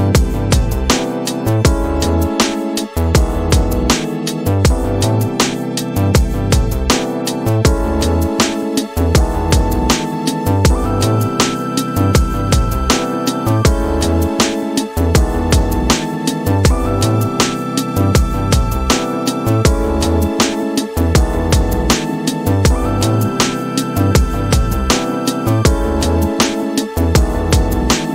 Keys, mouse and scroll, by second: 11.0 space, 14.5-16.3 drag, 17.4 click, 19.8 click, 22.0-23.6 right drag, 24.7 right click, 26.9 right click.